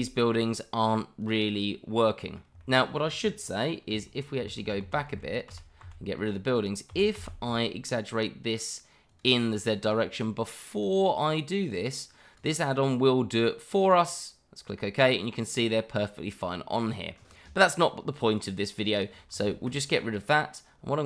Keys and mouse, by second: 1.5-2.4 middle drag, 2.6 shift+middle drag, 4.4 ctrl+z, 6.9 s, 7.1 z, 9.6-10.0 middle drag, 10.8-14.4 drag, 15.1-17.1 middle drag, 19.3 ctrl+z, 20.0-20.4 middle drag.